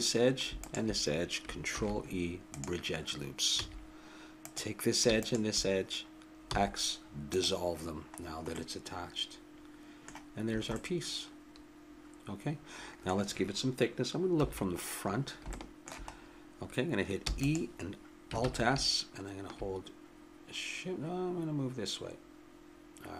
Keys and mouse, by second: 1.8 ctrl+e, 3.5 a, 4.4-6.9 drag, 6.5 x, 8.6-10.1 middle drag, 10.5 a, 14.3 KP_1, 17.2 e, 18.4 alt+s.